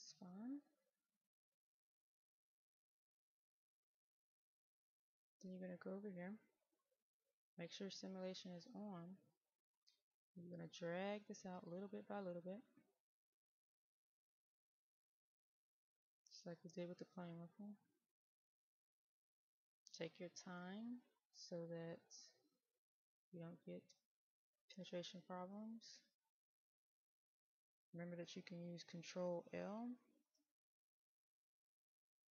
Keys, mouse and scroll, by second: 0.2 right click, 1.1-3.3 middle drag, 4.1 click, 5.6-6.2 scroll up 1, 6.2 middle click, 7.8-27.6 drag.